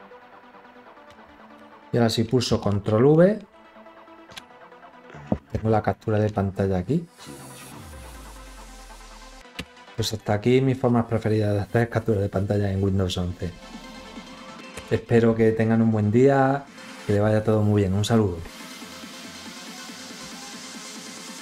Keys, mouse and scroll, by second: 1.2 ctrl+v, 3.9 ctrl+scroll up 1.